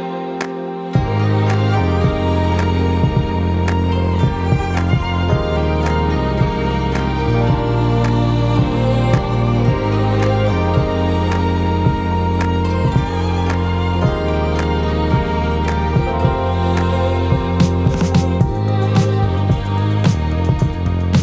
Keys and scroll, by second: 21.0 ctrl+space.